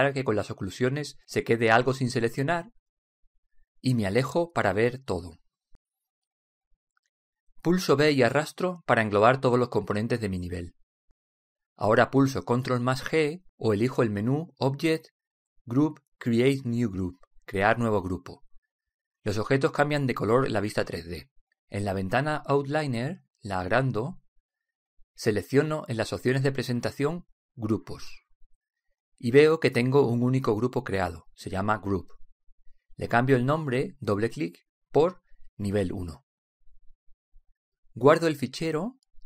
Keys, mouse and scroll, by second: 0.2-3.3 drag, 3.7-7.0 middle drag, 7.4 b, 7.7 b, 14.2 ctrl+g, 16.4-18.2 drag, 20.0-22.0 middle drag, 25.2 ctrl+click, 25.7 click, 26.4 click, 32.5-34.7 drag.